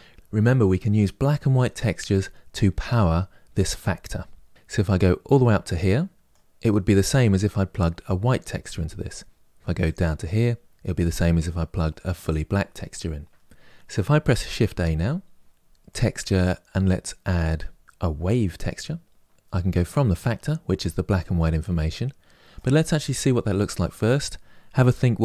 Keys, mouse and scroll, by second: 4.9-22.4 drag.